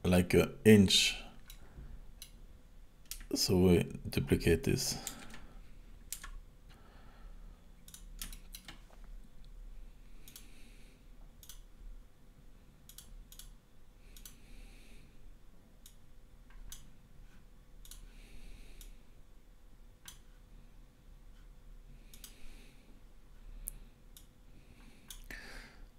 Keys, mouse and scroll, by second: 1.5 middle click, 5.1 shift+d, 8.3 shift+middle click, 10.3 click, 11.5 click, 12.9 click, 13.3 click, 15.9 click, 17.9 click, 18.8 click, 22.1 click, 22.7-24.2 scroll up 2, 24.2 click.